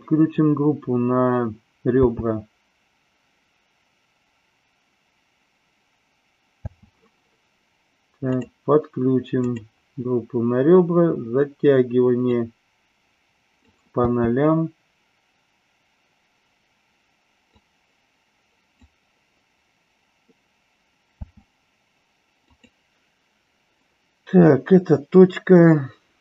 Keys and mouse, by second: 1.9 space, 6.7 space, 8.4-9.7 drag, 12.3-13.7 drag, 13.9 space, 17.4-18.7 drag, 21.2 space, 22.4-26.2 drag.